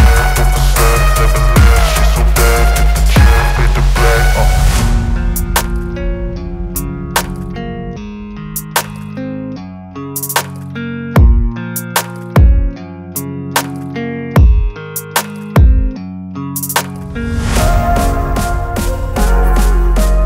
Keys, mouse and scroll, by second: 0.3 click, 2.4 right click, 3.8 click, 5.8-10.4 shift+drag, 19.1-20.2 drag.